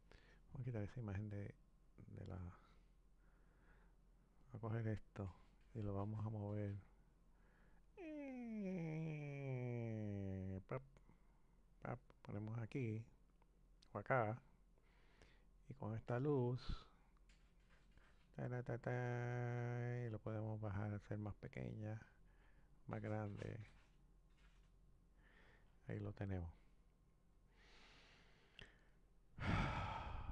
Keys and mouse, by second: 1.6 click, 4.4 click, 6.2 click, 11.6 click, 13.6 click, 16.0 click, 17.0 click, 20.2 click, 23.2 click.